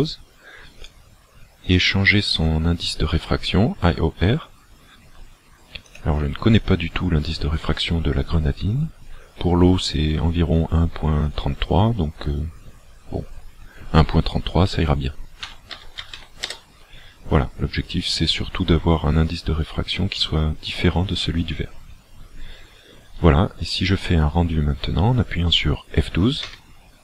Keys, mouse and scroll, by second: 5.9 click, 26.9 F12.